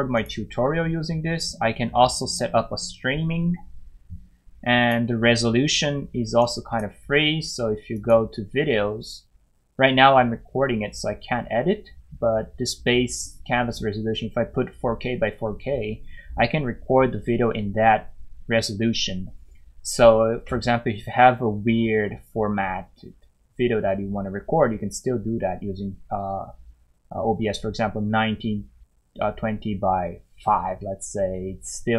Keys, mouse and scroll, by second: 0.1 click, 4.8 click.